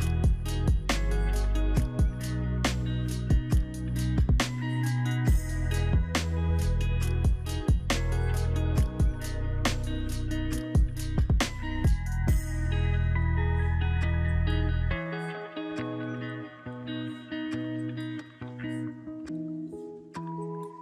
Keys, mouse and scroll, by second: 5.8 right click, 6.4 double click, 13.0 double click, 13.2 double click.